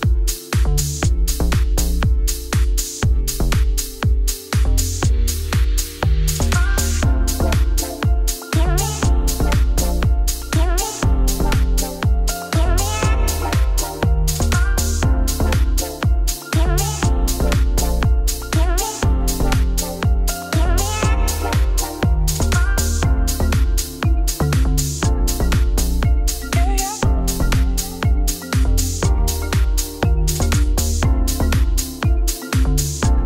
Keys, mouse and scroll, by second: 1.1 3, 1.4 shift+d, 1.8 p, 2.1 Tab, 2.3 click, 2.6 shift+click, 3.1 KP_Subtract, 3.4 shift+middle click, 3.8 scroll up 1, 3.9 click, 4.2 Tab, 4.3 a, 4.4 middle click, 4.7 g, 7.6 middle click, 8.3-9.5 scroll up 1, 14.2 ctrl+r, 16.5 ctrl+b, 18.7 g, 20.6 s, 22.8 ctrl+r, 25.4 ctrl+z, 25.6 ctrl+z, 25.7 ctrl+z, 25.9 ctrl+z, 26.6 ctrl+r, 27.3 alt+shift+click, 27.7 KP_1, 27.9-28.2 scroll up 2, 28.2 ctrl+b, 29.7 3, 29.9 alt+click, 30.3 g.